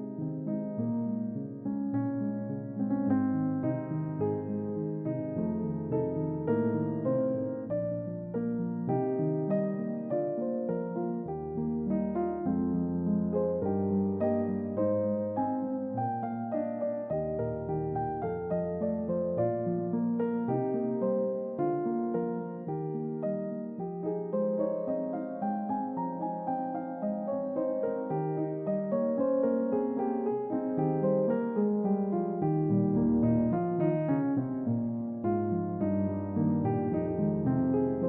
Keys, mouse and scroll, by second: 0.0 click, 2.1 middle click, 5.6-9.4 drag, 11.8 click, 13.3-14.0 drag, 14.4-14.8 drag, 15.7 click, 19.6 click, 23.3-25.7 drag, 26.1-28.1 drag, 28.9-33.7 drag, 34.7-37.7 drag.